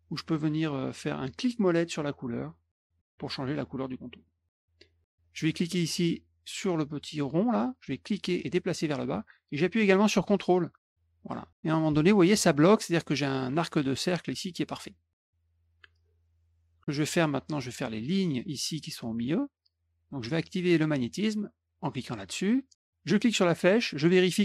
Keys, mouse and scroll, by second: 2.8 middle click, 4.2 middle click, 7.9-12.3 drag, 22.0 click, 23.1 click.